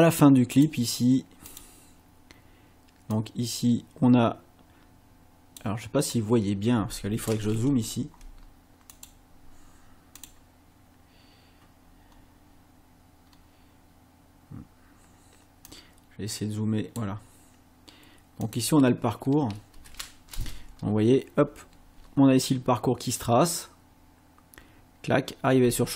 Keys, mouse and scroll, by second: 0.6 click, 1.5 click, 3.1-5.8 drag, 7.8-8.1 ctrl+scroll up 2, 8.9 click, 10.3 click, 12.1 scroll up 2, 13.4 scroll up 2, 15.7-17.3 drag, 18.5 click, 19.8 space, 25.7 space.